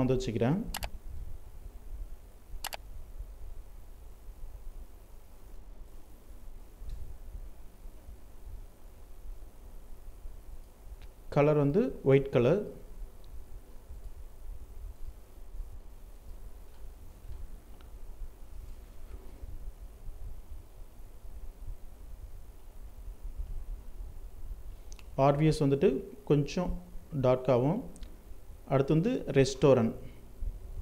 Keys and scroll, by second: 5.0 ctrl+alt+z, 6.0 alt+l, 15.0 ctrl+space.